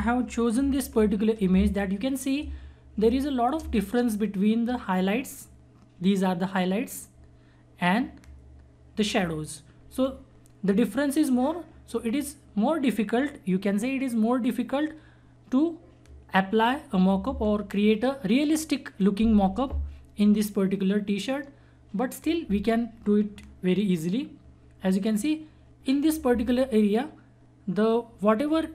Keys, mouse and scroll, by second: 1.5 space, 1.8 click, 2.0 space, 3.0 click.